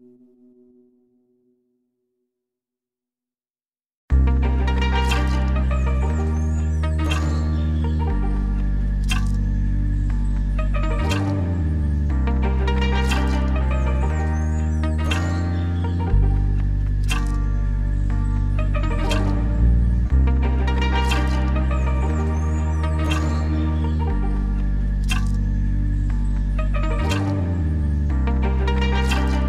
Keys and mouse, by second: 0.1 click, 2.3 middle click, 2.9 middle click, 4.0 click, 4.7 click, 5.7 click, 6.3 click, 7.5 ctrl+z, 7.5-8.3 drag, 8.5 click, 9.3 ctrl+z, 12.6 ], 12.8-26.3 drag, 12.8 ], 27.2-28.8 drag, 28.5 [, 29.2 ctrl+z, 29.3 [.